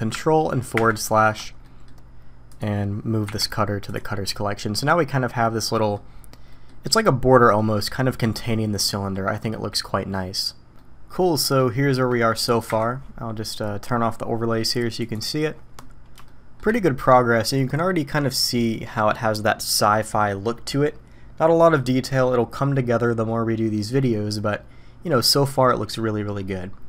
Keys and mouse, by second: 1.6 drag, 3.2 m, 4.6-5.9 middle drag, 6.5 middle click, 8.8-9.1 middle drag, 9.7-11.6 middle drag, 12.7 KP_1, 15.0 click, 16.2-16.6 shift+drag.